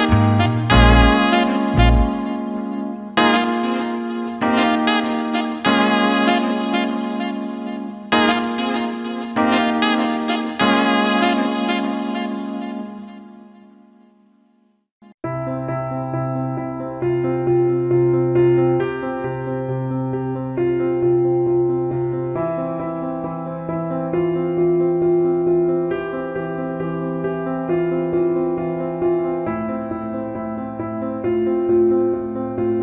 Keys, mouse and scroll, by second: 1.1 click, 2.7-13.9 drag, 5.3 l, 6.7 BackSpace, 16.6-18.1 drag, 19.5 click, 21.6 click, 21.9 alt+middle click, 22.6 alt+middle click, 23.2 click, 23.9-25.1 alt+middle drag, 25.4 alt+middle click, 26.1 click, 27.5 click, 28.4 click, 29.4 alt+middle click, 30.4 alt+middle click, 32.5 click.